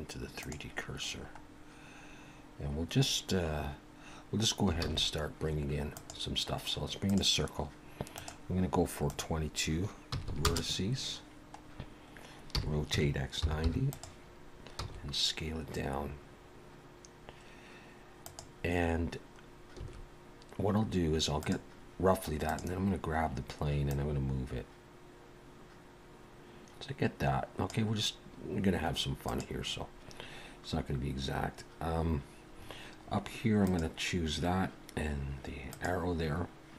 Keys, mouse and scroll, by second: 1.3-1.7 scroll up 2, 2.5 scroll down 1, 4.8 shift+a, 8.2 click, 9.1 click, 10.2 typing, 11.6-11.9 scroll down 2, 12.5 r, 19.0-19.4 scroll up 1, 19.8 s, 22.5 click, 23.9 click, 28.2 scroll up 2, 29.2 click, 32.6-33.6 scroll down 6, 33.6 click.